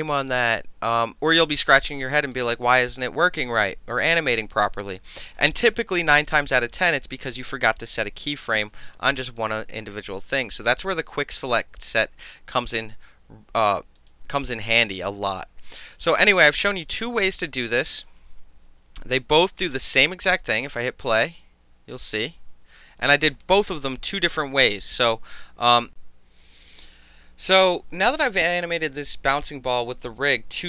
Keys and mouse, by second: 1.3-2.3 drag, 9.4 click, 10.9-11.5 drag, 14.0 click, 16.4-19.4 drag, 20.4 click.